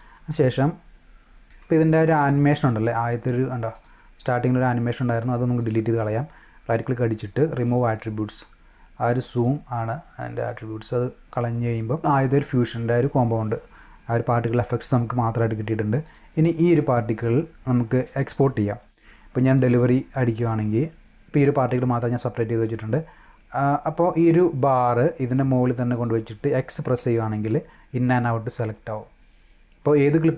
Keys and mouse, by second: 1.6 space, 3.6 click, 5.5 click, 5.9 right click, 7.6 click, 9.2 click, 10.3 click, 11.7 click, 16.0 click, 19.5 click, 21.9 click, 24.1 click, 24.5-25.3 drag, 25.8 click, 26.9 x.